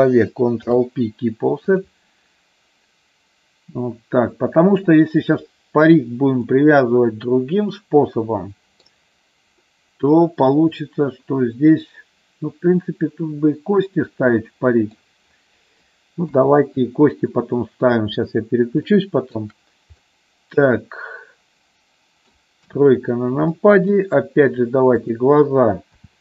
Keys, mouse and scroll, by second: 0.6 ctrl+p, 6.4-8.9 middle drag, 9.5-14.9 middle drag, 16.2 KP_3, 18.8 shift+middle click, 19.9-22.3 middle drag, 22.6 KP_3, 23.5 shift+middle click, 25.9 e.